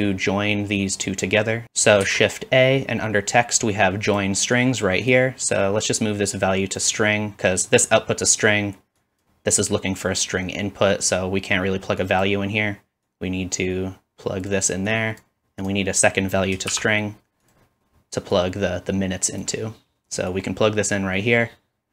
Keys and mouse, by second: 1.6 ctrl+z, 1.6 shift+middle click, 1.6 x, 2.0 shift+a, 5.6-17.6 drag, 16.7 shift+d, 17.6-18.3 middle drag, 18.3-21.9 drag.